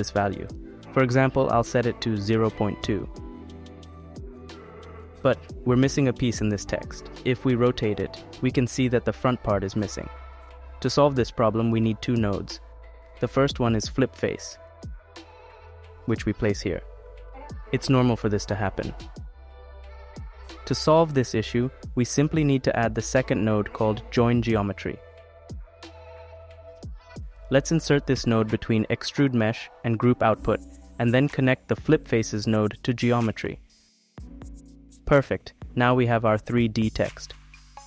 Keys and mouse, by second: 0.2-2.8 drag, 4.2 click, 5.6-7.1 drag, 7.7 click, 10.8 middle click, 12.4 shift+a, 16.5 click, 20.4 click, 21.5 click, 23.0 click, 23.2 shift+a, 29.4 click, 31.4 click, 33.4-34.7 drag, 36.6 click, 37.3 click.